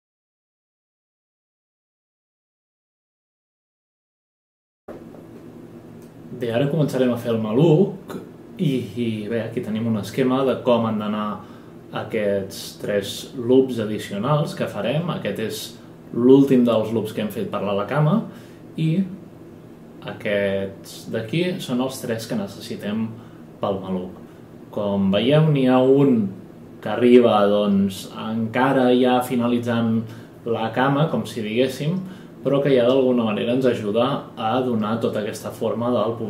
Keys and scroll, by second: 0.0 space, 1.1 F10, 1.3 ctrl+shift+a, 1.6-2.1 space, 2.9 F8.